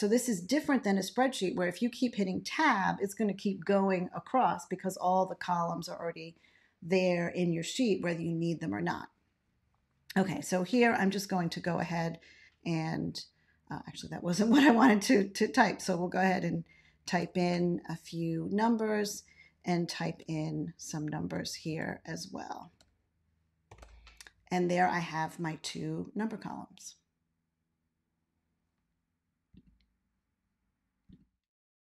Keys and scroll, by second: 11.6 3, 11.8 Return, 15.6 2, 15.8 Return, 16.2 3, 16.2 Return, 17.0 4, 17.1 Return, 17.4 5, 17.5 Return, 20.0 3, 21.3 Return, 21.6 5, 21.7 Return, 22.6 7, 22.7 Return, 23.6 9, 23.8 Return.